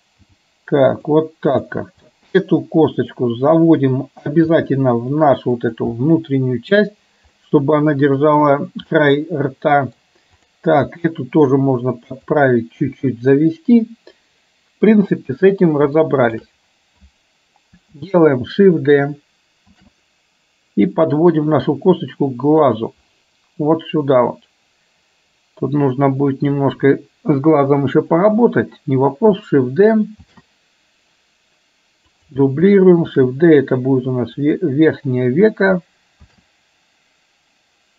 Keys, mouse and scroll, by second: 1.6 click, 2.2-3.2 middle drag, 6.1 middle click, 7.5 middle click, 9.1-10.1 middle drag, 13.1 KP_1, 16.1 shift+middle click, 19.8 shift+d, 30.5 shift+d, 33.2 shift+d, 36.3 shift+d.